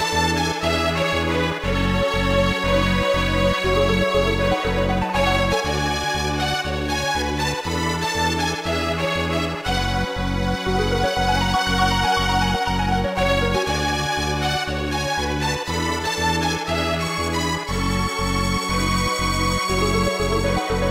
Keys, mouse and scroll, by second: 0.6 click, 4.1 click, 6.9 click, 7.3 i, 9.0 click, 9.2 i, 10.2 click, 10.6 i, 11.5 click, 12.7 ctrl+s, 12.9 click, 16.1 click, 17.1 click, 18.4 scroll down 1, 19.9 typing.